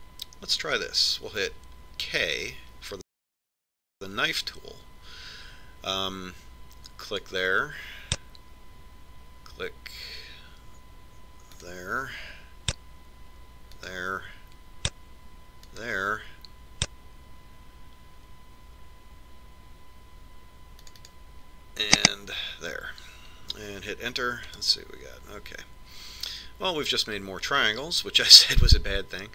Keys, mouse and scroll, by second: 4.3 k.